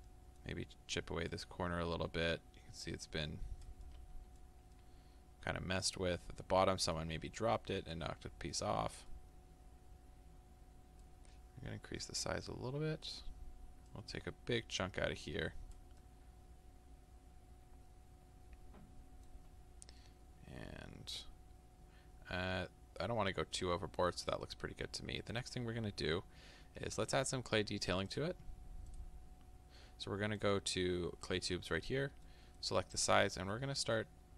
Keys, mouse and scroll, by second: 1.3-3.9 drag, 3.9-13.9 middle drag, 13.9-16.0 drag, 16.0-30.5 middle drag, 30.5-32.3 drag, 32.3-34.3 middle drag, 33.4-34.3 scroll up 2.